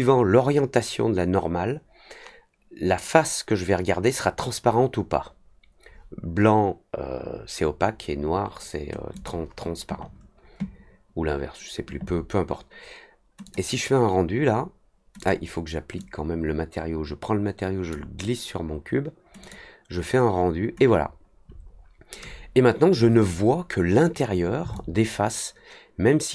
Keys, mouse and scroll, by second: 9.1 click, 13.4 click, 15.1 click, 15.9-17.8 drag, 19.4 click, 24.7-26.3 alt+drag.